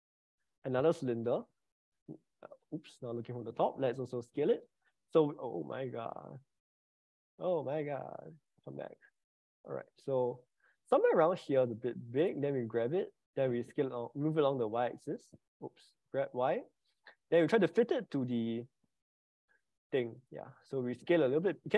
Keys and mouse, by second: 1.5 click, 2.7 click, 4.4 s, 14.6-16.3 typing, 21.3 s.